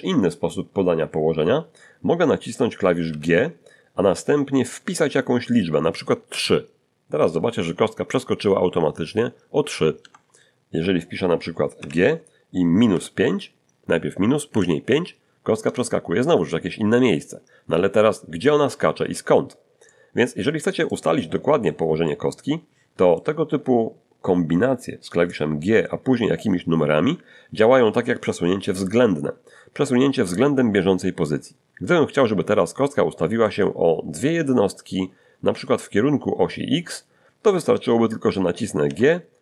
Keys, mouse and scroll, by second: 3.1 g, 6.3 3, 10.0 Return, 11.1 scroll down 2, 11.8 g, 14.5 5, 15.6 Return, 19.8-21.0 middle drag, 21.1 middle click, 22.0-23.3 middle drag, 32.1-33.6 middle drag, 38.8 g.